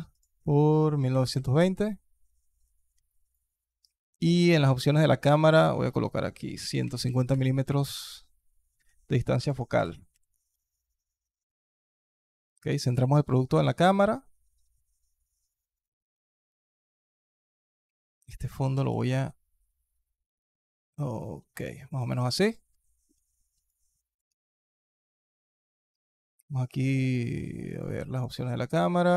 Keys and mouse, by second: 2.9 alt+click, 4.4 click, 5.3-7.1 drag, 9.1 alt+click, 9.6 g, 12.5 g, 16.0 alt+drag, 17.3-17.7 alt+drag, 18.6 s, 21.7 click, 22.1 alt+drag, 22.5-22.9 alt+drag, 23.5-24.0 alt+drag, 27.5 click.